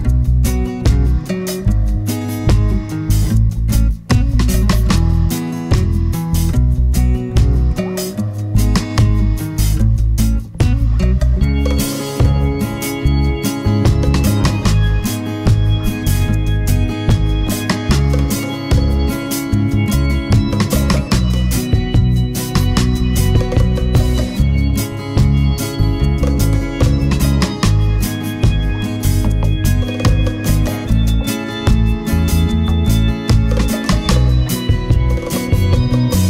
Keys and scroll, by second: 15.6 Page_Down, 20.1 super+c, 20.3 super+v.